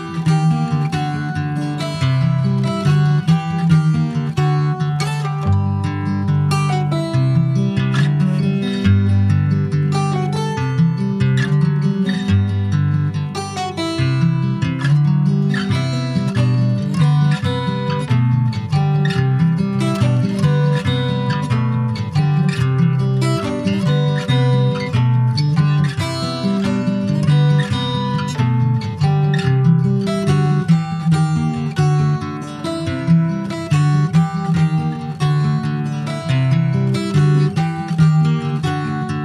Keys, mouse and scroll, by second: 0.6 ctrl+s, 0.9-3.8 shift+middle drag, 3.8 shift+d, 4.9 middle click, 5.7-6.2 shift+scroll up 1, 6.2 e, 12.8-13.9 middle drag, 13.9 p, 15.2 Tab, 15.3 click, 15.6 click, 17.6 a, 18.2 ctrl+a, 19.2 click, 19.7 click, 20.2 shift+click, 20.5 shift+click, 21.4 click, 22.0 click, 22.5 shift+click, 23.9 ctrl+j, 24.2 ctrl+click, 24.7 click, 25.5 Tab, 26.1 Tab, 26.8 Tab, 27.3 middle click, 27.6 Tab, 28.9 Tab, 29.7 ctrl+r, 30.9 ctrl+b, 38.6-39.2 middle drag.